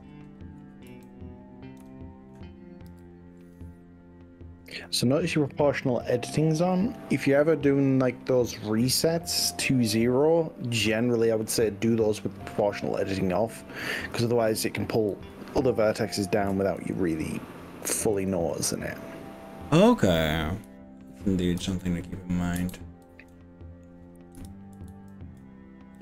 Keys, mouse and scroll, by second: 0.9 z, 1.8 KP_0, 2.9 0, 4.7 click, 5.6 middle click, 6.1-7.9 middle drag, 11.1-14.2 middle drag, 14.2 click, 14.3 middle click, 15.1 z, 16.9 z, 18.3 ctrl+z, 20.7 z, 21.8 middle click, 22.7 ctrl+z, 23.3 middle click, 24.4 KP_1, 24.9 ctrl+z.